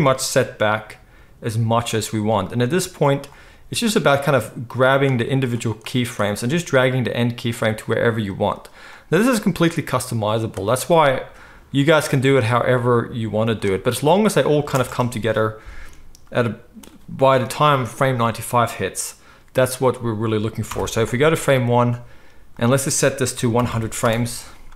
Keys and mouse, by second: 0.2 g, 1.8 middle click, 2.4 click, 2.5-3.0 middle drag, 3.0-4.9 drag, 3.5 g, 4.9 middle click, 5.8-7.7 drag, 7.0 g, 7.7-8.3 middle drag, 8.3 click, 8.4 middle click, 8.9-10.4 drag, 9.4 g, 10.4-11.9 middle drag, 11.9-13.5 drag, 12.3 g, 13.5-18.0 middle drag, 14.7 space, 18.0 space, 20.7 shift+Left, 21.0 middle click, 22.4 middle click, 22.5-24.7 drag, 23.7 0.